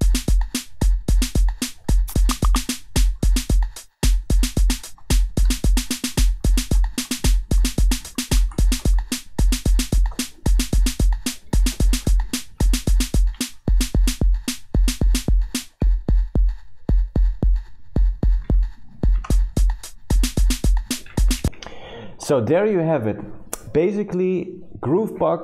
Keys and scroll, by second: 0.0-0.2 typing, 1.9 u, 2.3 r, 3.0 t, 3.4 r, 4.8-9.4 typing, 12.5 shift+4, 13.3 shift+5, 15.8 shift+2, 18.9-20.1 typing, 21.4 Escape.